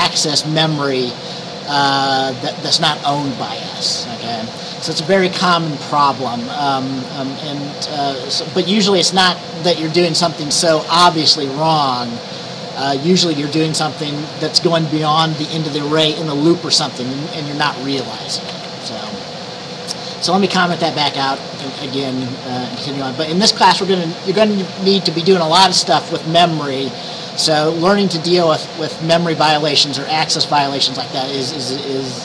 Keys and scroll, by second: 21.2 typing, 21.9 Down, 22.0 Left, 22.2 Left, 22.9 typing.